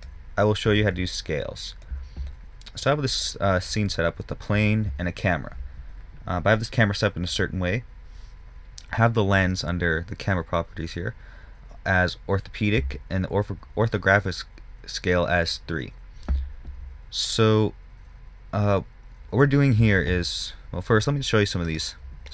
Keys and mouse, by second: 7.6-13.6 drag.